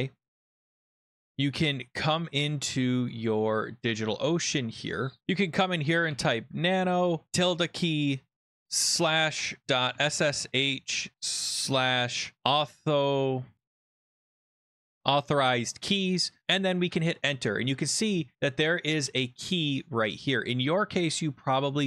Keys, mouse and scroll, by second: 0.3-1.0 scroll, 3.1 click, 4.1 click, 4.5 click, 5.2-7.3 typing, 8.6-12.9 typing, 14.0-15.4 typing, 16.8 Return.